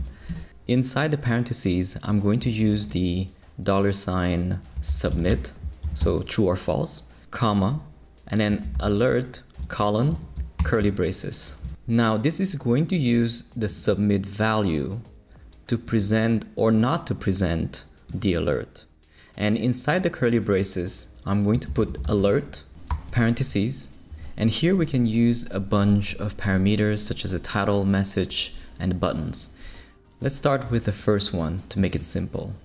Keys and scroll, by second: 0.0-0.4 typing, 2.7 shift+4, 4.5-5.8 typing, 8.3-10.6 typing, 10.8 shift+Return, 11.6 shift+super+Return, 21.4-22.9 typing.